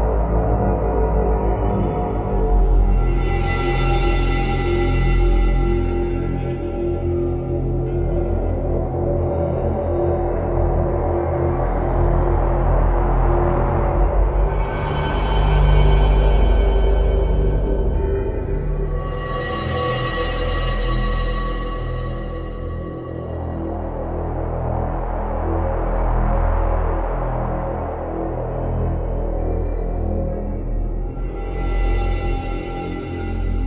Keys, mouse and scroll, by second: 0.0 shift+middle click, 1.3 middle click, 9.1 click, 10.0 click, 14.8 click, 15.7 click, 24.5 middle click, 25.6-26.1 scroll up 2, 27.9 click, 29.8 click, 31.1 middle click.